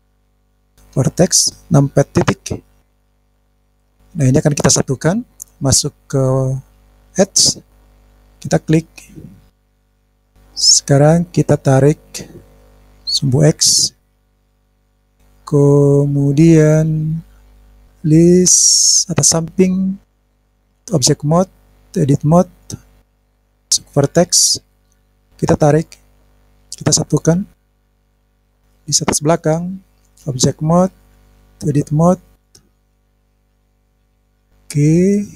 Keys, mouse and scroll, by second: 0.5 click, 2.2 KP_Decimal, 2.9 KP_Decimal, 3.2-3.5 scroll down 6, 3.4 scroll up 1, 3.5 scroll down 2, 3.6-4.2 scroll down 2, 6.5 click, 8.2 click, 8.9-10.0 scroll down 3, 12.4 click, 13.0 click, 14.8-16.8 middle drag, 20.0 click, 20.8 click, 23.0 click, 23.6 click, 25.8 click, 26.4 click, 28.1 middle click, 28.6 click, 30.1-31.1 drag, 31.6 click, 32.6 click, 32.9 click, 33.1 middle click, 33.1 scroll down 1, 33.7 middle click, 33.9 click, 34.1 click, 35.1 click.